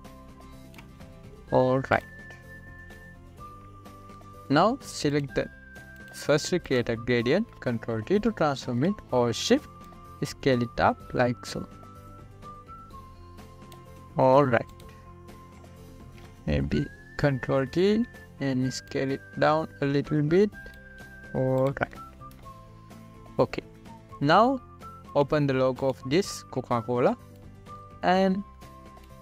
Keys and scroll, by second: 9.5 ctrl+t.